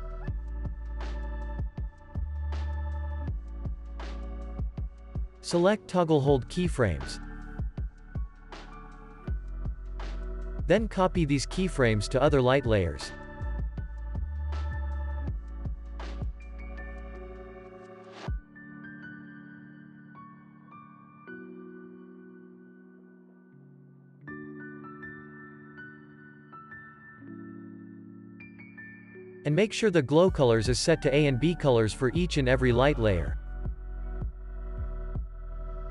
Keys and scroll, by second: 0.9 z, 1.4 x, 2.1 z, 2.5 x, 3.4 ctrl+s, 9.9 ctrl+s, 10.7 z, 12.6 ctrl+c, 16.2 ctrl+v, 17.0 ctrl+s, 18.1 u, 27.5 z, 28.2 x.